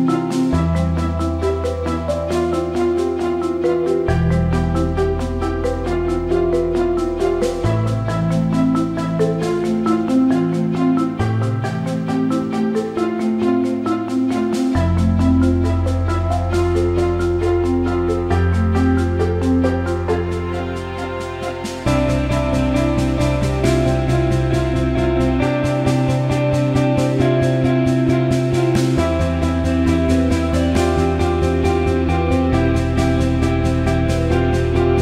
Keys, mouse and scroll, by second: 3.3 right click, 3.6 click, 4.9-7.7 drag, 8.6 ctrl+=, 9.9-11.8 drag, 11.8 right click, 12.0 click, 13.4 click, 15.8 click, 17.1 click, 17.2 click, 20.0 click, 21.6 scroll down 1, 23.0 ctrl+Num_Lock, 23.0 scroll down 1, 23.2 ctrl+-, 24.6-26.1 drag, 26.1-27.6 drag, 27.6-28.9 drag, 28.9-33.3 drag, 33.3 click.